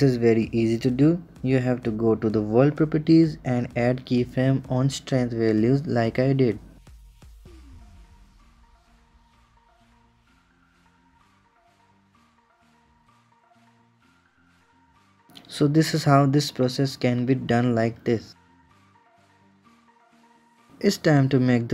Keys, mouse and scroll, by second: 0.0 click, 0.8-2.8 right drag, 2.8-5.1 drag, 7.1-8.6 drag, 11.5-13.7 drag, 14.0-15.1 right drag, 15.1 click, 15.7-16.7 drag.